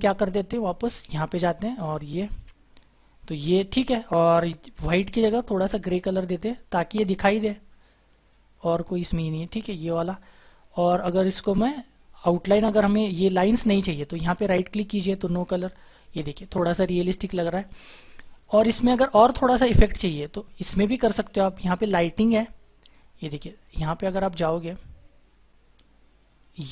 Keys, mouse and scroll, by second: 15.0 right click.